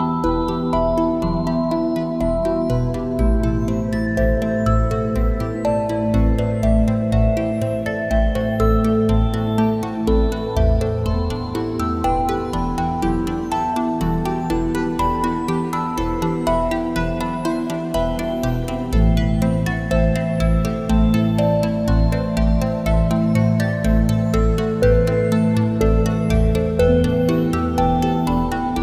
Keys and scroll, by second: 4.4 ctrl+shift+a, 4.6 space, 5.3 space, 10.6 a, 10.8 space, 13.1 space, 20.1 space, 22.6 space, 27.4 `, 27.6 space.